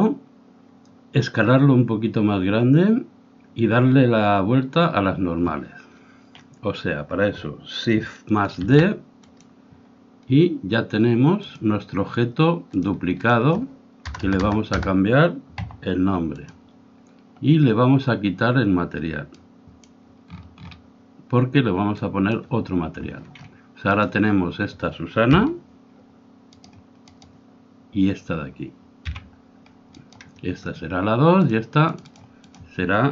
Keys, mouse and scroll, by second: 8.5 shift+d, 11.5-14.8 drag, 14.3 BackSpace, 14.8 BackSpace, 19.4-21.3 drag, 20.9-23.6 middle drag, 22.1-25.8 drag, 25.3 g, 27.3-29.0 right drag, 29.0 g, 31.5-33.1 drag.